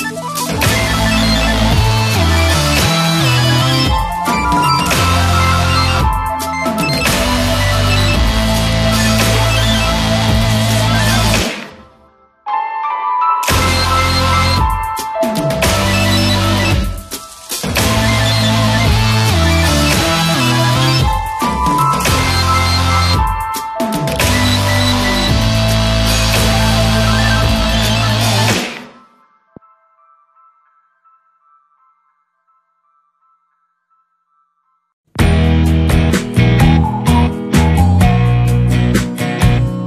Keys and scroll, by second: 0.4 space, 6.0 space, 8.5 ctrl+KP_Subtract, 16.2 space, 19.0 ctrl+space, 20.7 ctrl+y, 21.8 ctrl+space, 25.3 Return, 31.4 ctrl+w, 31.6 Return, 33.3 alt+space, 34.8 c, 36.4 alt+i, 36.7 alt+a, 36.9 ctrl+space, 37.4 shift+F2, 38.2 space, 38.7 w, 39.2 space.